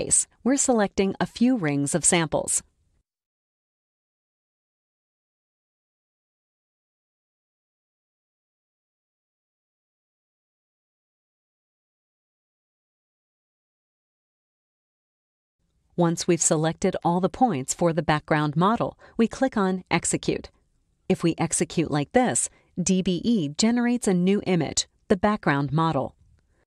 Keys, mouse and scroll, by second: 0.5 click, 1.2 click, 1.9 click, 2.6 click, 3.2 click, 4.2 click, 5.5 click, 6.4 click, 7.5 click, 9.2 click, 11.1 click, 12.3 click, 12.9 click, 14.5 click, 15.6 click, 21.7 click, 26.3 ctrl+a.